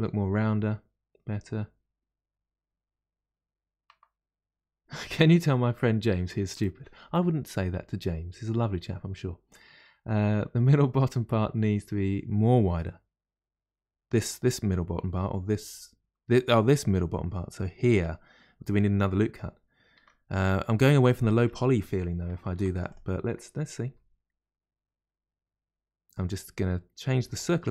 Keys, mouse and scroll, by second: 19.9 Tab, 20.8 Tab, 21.0 click, 21.4 Tab, 22.4 ctrl+r, 22.7 ctrl+r, 23.8 s.